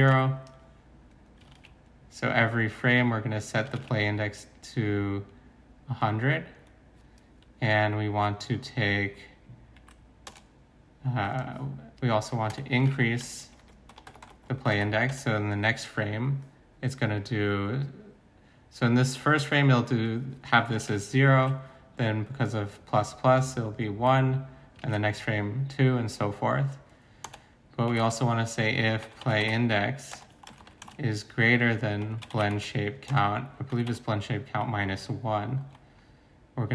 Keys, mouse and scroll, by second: 0.0-0.1 typing, 1.5 ctrl+c, 3.8 ctrl+v, 10.3 shift+Return, 12.5 Return, 12.8 ctrl+v, 13.9-15.1 typing, 17.6-18.0 typing, 20.9 0, 21.4 ctrl+z, 23.8-24.6 typing, 24.8 ctrl+z, 27.2 Return, 27.6-36.1 typing, 30.1 Return, 35.0 Right.